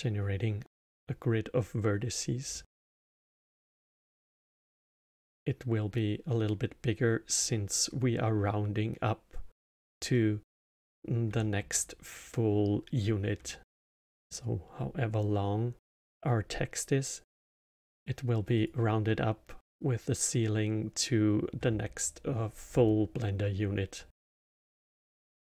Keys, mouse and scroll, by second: 2.5-5.5 alt+middle drag, 10.1-14.4 alt+middle drag, 18.5 click, 24.7-25.4 middle drag.